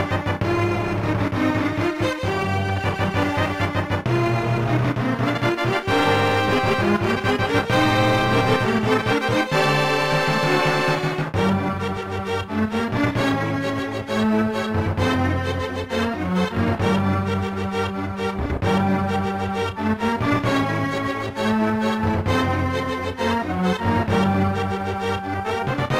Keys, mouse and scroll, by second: 13.3 click, 18.2 click, 18.3 click, 19.2-20.6 typing, 22.4 right click, 22.5 right click, 23.4 click, 23.5 click, 24.2 click, 24.3 click, 25.1 r.